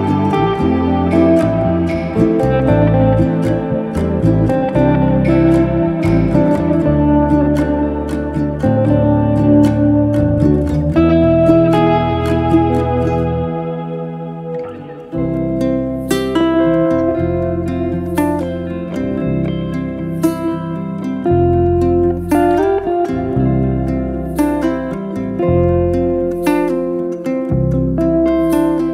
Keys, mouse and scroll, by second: 1.3 click, 2.2-2.7 scroll up 3, 2.7 g, 4.6-6.1 middle drag, 6.6 r, 8.6 ctrl+z, 8.9-9.7 middle drag, 9.7 click, 10.7-11.1 scroll down 1, 11.1 r, 13.1 z, 13.2-14.7 middle drag, 14.7 click, 15.1 shift+click, 15.8-16.9 drag, 16.9 scroll down 1, 17.0-18.5 middle drag, 18.5 alt+d, 20.6 z, 20.9 middle click, 21.4 scroll down 2, 21.6 middle click, 23.0-24.3 drag, 24.3-24.8 middle drag, 24.8 r, 27.0 z, 27.1 z, 27.3-28.9 middle drag.